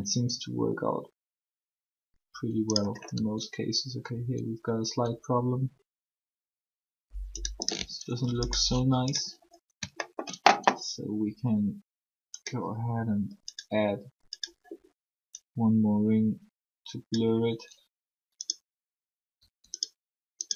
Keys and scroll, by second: 3.1 r, 19.4 r.